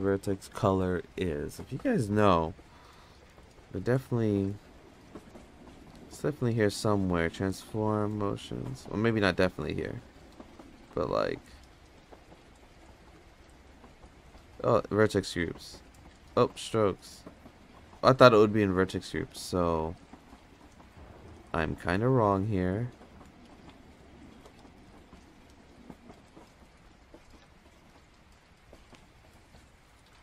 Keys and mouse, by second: 5.8 click, 8.4 click, 9.1 click, 12.0 click, 14.9 click, 16.4 click, 19.6 click, 20.7 click, 23.3 click, 23.7 click, 24.2 click, 24.6 click, 25.5 click, 25.8 click, 26.2 click, 26.6 click, 26.9 click, 27.3 click, 29.2 click.